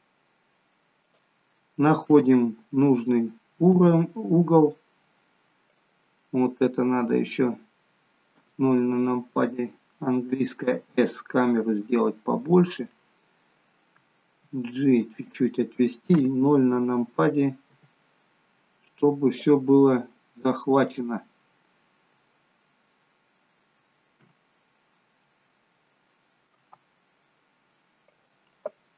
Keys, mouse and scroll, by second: 2.2 KP_0, 3.5 g, 8.2 KP_0, 10.6 s, 14.4 g, 16.0 KP_0, 17.7 g, 24.1 KP_0, 26.6 s.